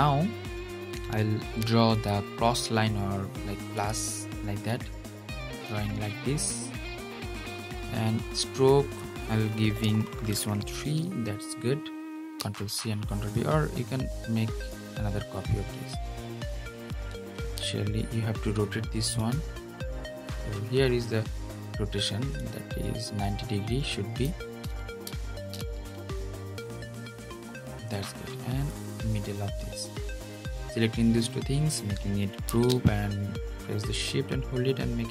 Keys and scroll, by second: 11.8 super+v, 17.1 super+z, 32.2 super+g.